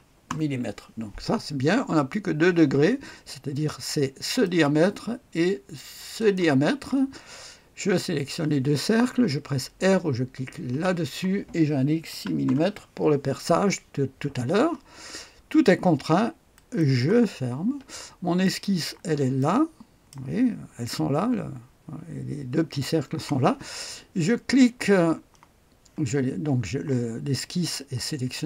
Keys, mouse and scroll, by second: 0.3 Return, 4.2 click, 6.2 click, 10.7 r, 12.1 KP_6, 12.4 Return, 16.5 click, 17.9-18.8 scroll up 1, 18.4 right click, 19.4 click, 19.4 right click, 20.3 click.